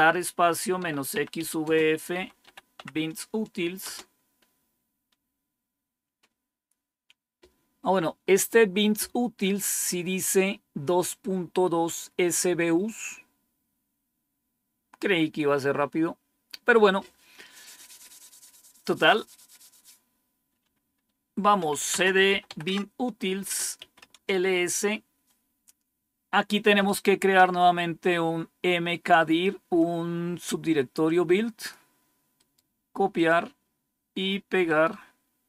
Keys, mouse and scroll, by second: 0.8-5.7 typing, 21.3-24.2 typing, 23.3 Return, 29.7-31.6 drag, 32.3 right click, 33.1 click, 34.6 right click.